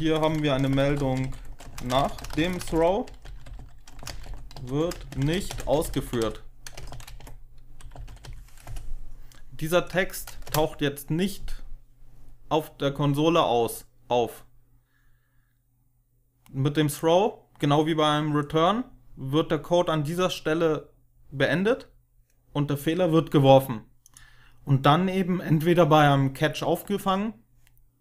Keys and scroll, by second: 0.0-8.6 typing, 10.3 Return.